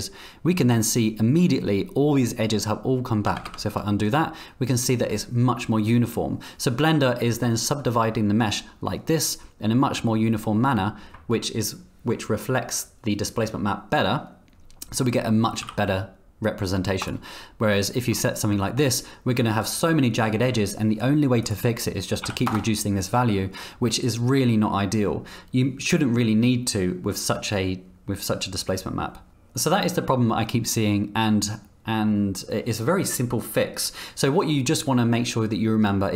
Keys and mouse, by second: 3.4 ctrl+z, 10.6 middle click, 11.1 middle click, 15.6 x, 18.3 shift+click, 22.9-25.1 drag, 29.3-36.1 middle drag.